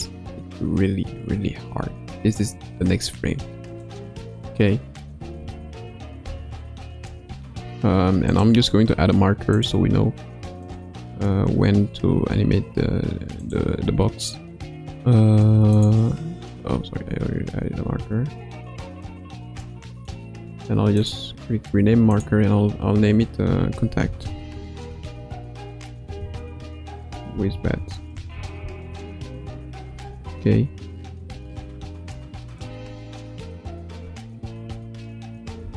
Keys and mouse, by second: 5.3 a, 6.1 i, 8.3-10.0 drag, 10.6-12.1 drag, 13.3-16.8 drag, 19.0 click, 19.3-20.3 drag, 21.1-29.7 drag, 30.1 ctrl+s, 32.5 click, 32.9 space, 35.6 space.